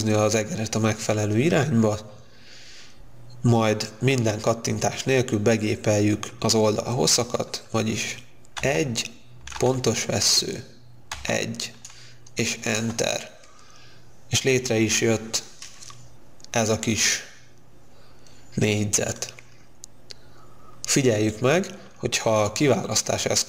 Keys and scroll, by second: 8.5 1, 11.3 1, 12.5 Return, 21.7 space.